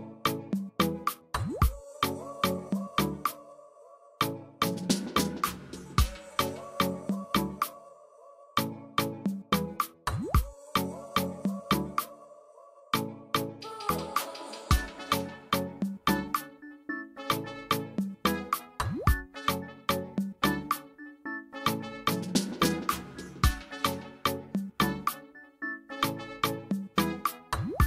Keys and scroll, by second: 0.7 Escape, 14.7 b, 16.9 \, 21.8 \, 25.7 \.